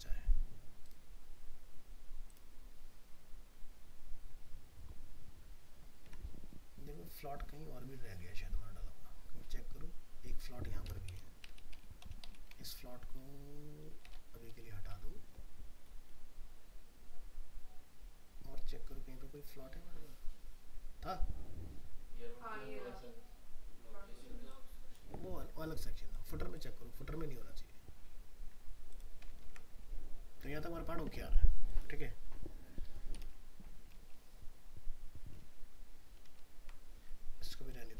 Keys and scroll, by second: 6.0 alt+Tab, 29.4 ctrl+s, 36.3 ctrl+z.